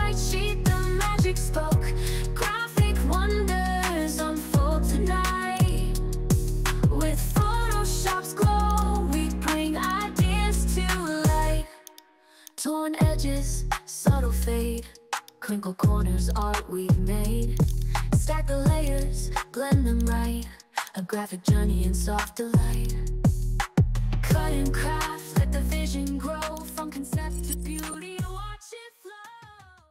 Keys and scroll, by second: 1.5 ctrl+alt+2, 4.2 ctrl+j.